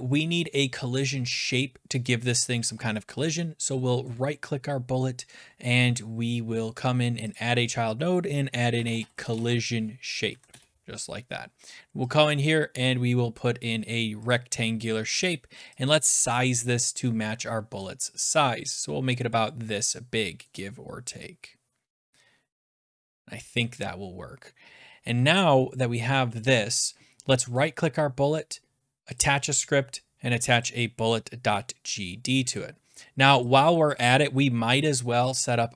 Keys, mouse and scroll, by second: 4.2 scroll, 7.3 click, 8.5-10.3 typing, 8.8 middle click, 10.5 Return, 11.4-13.8 typing, 12.1 click, 14.3 click, 16.7 click, 17.0 scroll, 19.3 click, 19.8-20.2 scroll, 20.5 middle click, 20.6 middle click, 23.0 click, 23.8 click, 25.2 scroll down 10, 27.6-28.9 scroll down 1, 29.8 click, 30.6 click, 31.2 middle click, 32.6 click, 33.4 click.